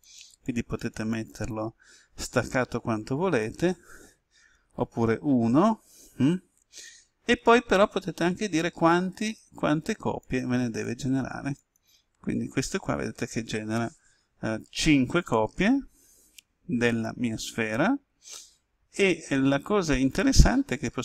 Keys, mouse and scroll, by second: 4.5 1, 5.0 Tab, 9.1 click, 12.3-13.0 scroll down 1.